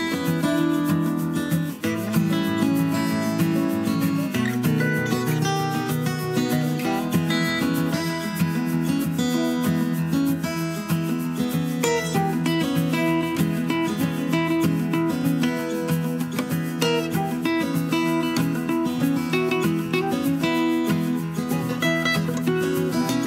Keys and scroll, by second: 4.0 Up, 4.3 Down, 16.0 super+d, 19.4 Left.